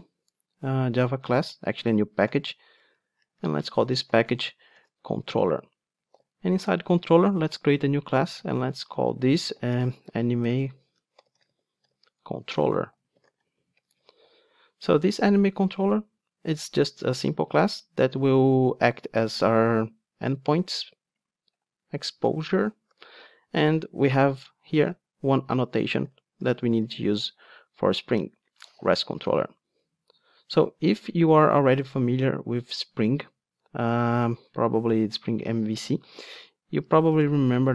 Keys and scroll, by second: 6.2 super+n, 28.1 Return.